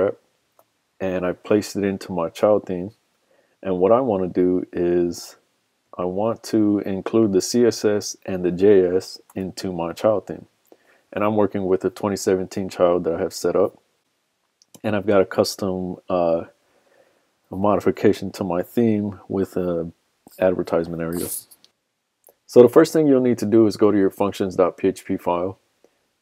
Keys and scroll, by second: 9.3 super+Tab.